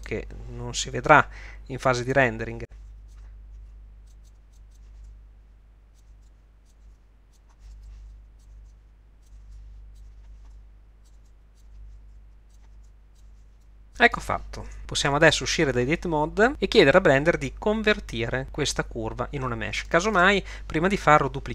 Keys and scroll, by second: 1.1 g, 2.8 r, 3.6 g, 4.2 g, 4.9 e, 6.1 r, 6.8 g, 8.0-13.5 typing, 15.3 Tab.